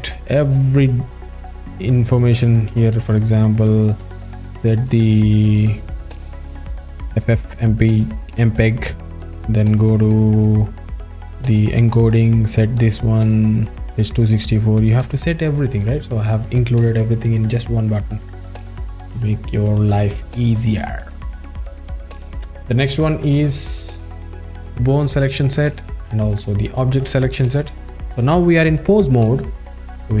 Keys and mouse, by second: 0.0 alt+middle click, 1.8 alt+middle click, 2.7-4.5 alt+middle drag, 5.2-5.5 drag, 5.6 click, 6.0-6.9 drag, 7.5 alt+middle click, 10.0 click, 10.8 alt+middle click, 11.5 click, 12.0 alt+middle click, 12.5-13.0 drag, 13.5 alt+middle click, 19.0 click, 24.7 click, 26.3 click, 28.9 click.